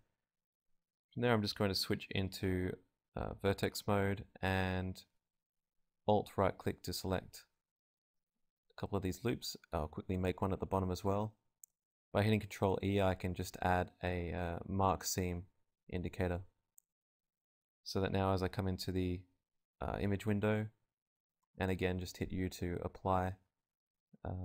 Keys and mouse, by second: 0.2 z, 0.7 KP_Decimal, 2.0 Tab, 3.5 KP_Divide, 4.9 ctrl+Tab, 6.3 z, 6.6-8.3 drag, 7.9 ctrl+e, 7.9 z, 10.7 a, 11.6 ctrl+r, 14.0-15.8 drag, 14.6 ctrl+e, 16.0 z, 16.7 z, 17.2 Tab, 18.3 a, 20.0 click, 21.5-22.6 drag, 24.2 u.